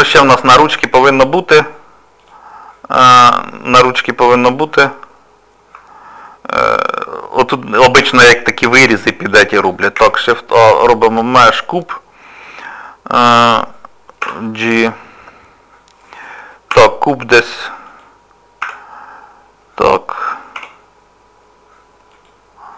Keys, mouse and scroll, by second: 0.2 shift+middle click, 2.2 click, 4.8 middle click, 10.0 shift+a, 12.8 shift+middle click, 14.2 g, 16.7 g, 18.6 z, 19.1 scroll up 2, 19.7-20.5 scroll up 1, 20.5 r.